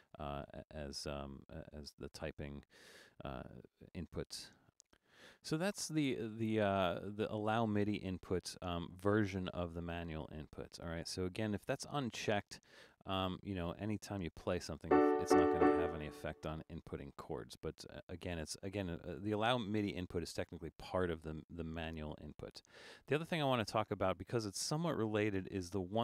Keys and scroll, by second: 0.0-2.4 typing.